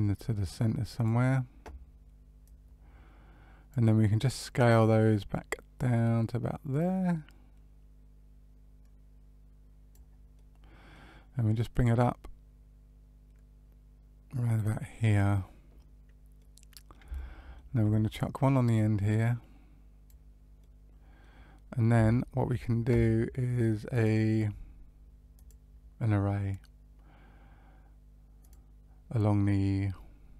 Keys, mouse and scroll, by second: 0.9 click, 2.4 click, 4.7 click, 10.3 middle click, 11.6 click, 16.3 middle click, 17.1 shift+middle click, 18.7 click, 20.5 middle click, 21.6 scroll down 1, 22.0 shift+middle click, 23.9 click, 25.3 click.